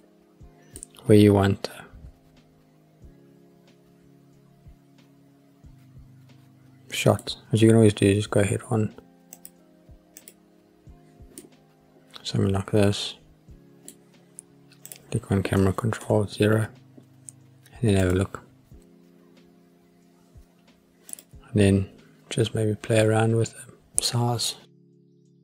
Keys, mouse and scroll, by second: 0.7-7.2 middle drag, 9.4 click, 10.2 click, 11.4-13.9 middle drag, 14.9 click, 16.0 ctrl+alt+KP_0, 18.3 click, 21.1 click, 25.1 click.